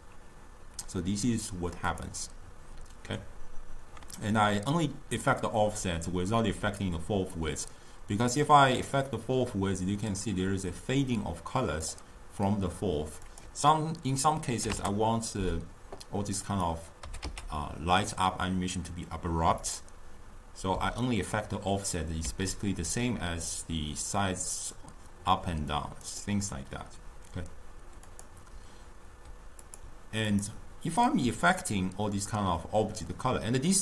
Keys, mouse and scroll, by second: 1.9 click, 7.8-10.8 drag, 13.4-16.5 drag, 16.5 click, 17.1 g, 22.3 s, 28.1 click, 29.7 click, 30.4 click.